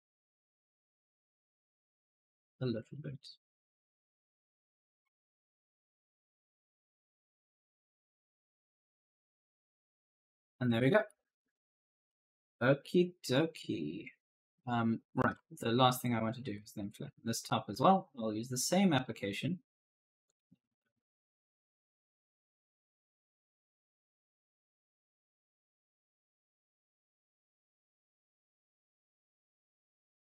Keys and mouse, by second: 2.4 right click, 3.3 click, 4.7-11.5 typing, 4.8 right click, 13.4 right click, 15.1-15.8 typing, 15.2 right click, 18.1 click, 20.1 click, 21.4 6, 21.8 0, 22.2 Return, 24.5 click, 27.1 click.